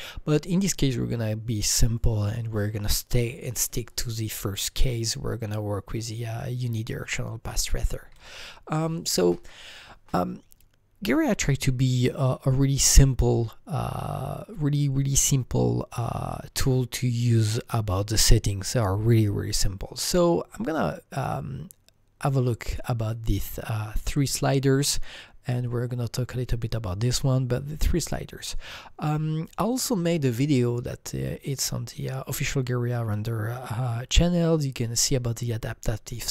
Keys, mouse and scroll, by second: 8.1 alt+Tab.